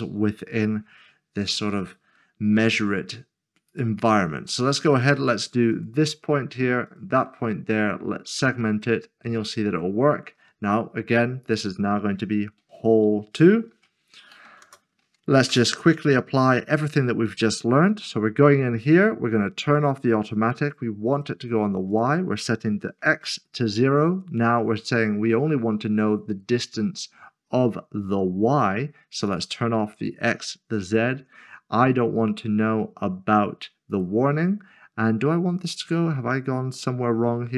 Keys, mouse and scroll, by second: 3.7 click, 4.3 s, 4.5 middle click, 5.7 click, 9.0 click, 10.9 scroll down 1, 11.4 click, 13.7-15.4 typing, 15.5 Return, 16.4-17.9 scroll down 1, 17.9-18.4 scroll down 1, 19.7 scroll down 1, 19.8 click, 22.7 typing, 23.2 Return, 23.6-24.1 scroll down 1, 29.3 click, 30.9-32.0 scroll down 1, 33.9 click.